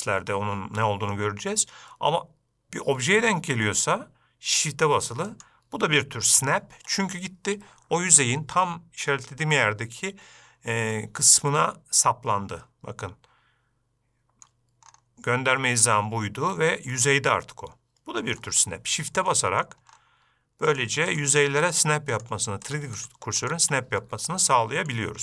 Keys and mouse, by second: 5.6 shift+right click, 11.3-14.8 middle drag, 17.3-18.8 middle drag, 19.7-20.0 middle drag, 21.0 shift+right click, 21.5 shift+right click, 22.0 shift+right click, 22.5 shift+right click, 23.0 shift+right click, 23.3 shift+right click, 23.8 shift+right click, 24.8-25.2 middle drag.